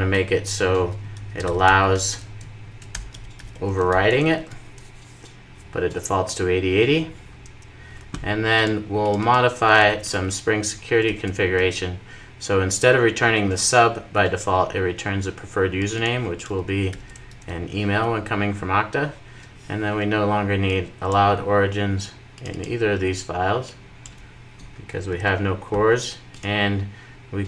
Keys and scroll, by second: 4.2 super+s, 10.8 super+v, 11.4 super+s, 16.7 super+v, 17.2 super+s, 24.9 super+s.